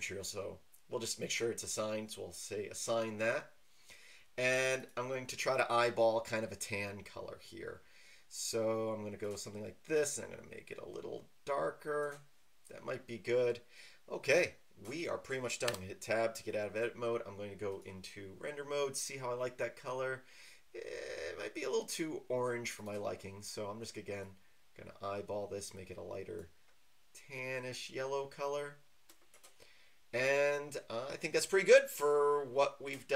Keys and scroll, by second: 15.7 Tab.